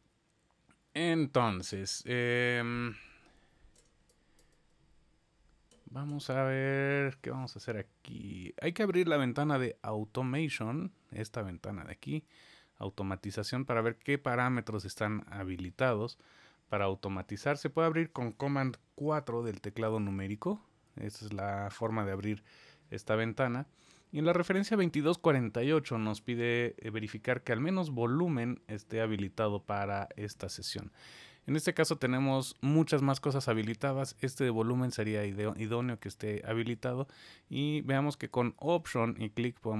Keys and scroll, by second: 19.1 super+4, 20.3 super+4.